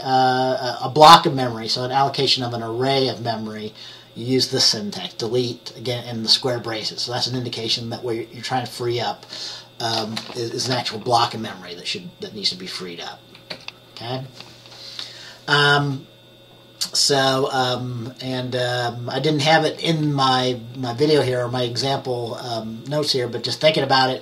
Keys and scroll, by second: 13.6 F10.